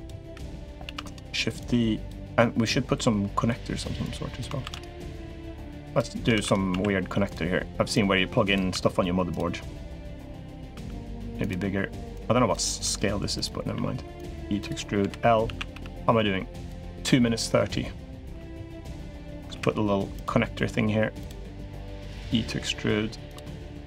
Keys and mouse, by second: 0.0 l, 0.6 shift+d, 1.3 click, 2.4 click, 3.9 click, 4.4 shift+d, 4.9 click, 5.7 click, 6.1 shift+d, 6.5 s, 7.8 click, 8.5 s, 9.6 click, 10.5 s, 11.9 click, 12.6 s, 13.5 e, 14.4 click, 14.8 l, 15.2 a, 15.5 g, 18.0 g, 19.3 ctrl+r, 21.3 3, 21.5 click, 21.8 e, 23.4 click.